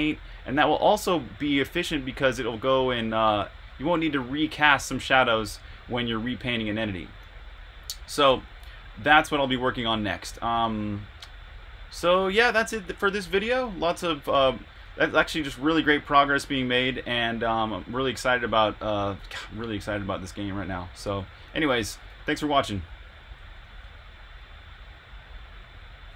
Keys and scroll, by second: 6.6 e, 8.3 r, 10.1 j, 13.0-22.0 typing, 23.4-24.1 typing.